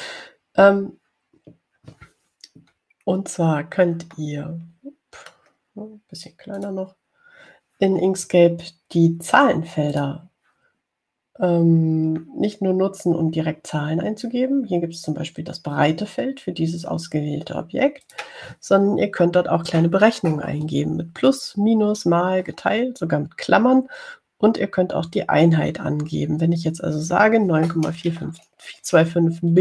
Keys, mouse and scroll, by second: 4.3 ctrl+scroll up 2, 5.4-6.8 drag, 7.9 click, 11.2 click, 19.3 click.